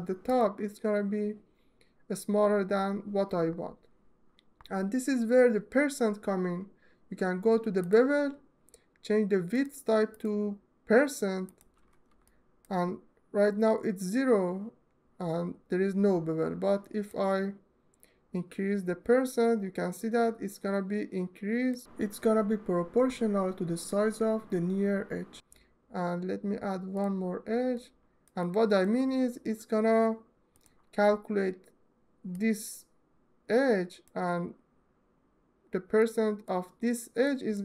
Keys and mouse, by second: 9.2-11.4 drag, 12.0-13.0 alt+shift+middle drag, 16.8-21.5 drag, 26.6 click, 27.4 ctrl+alt+middle click, 30.2 click, 32.0-33.8 drag, 35.6-36.1 drag, 36.9 click.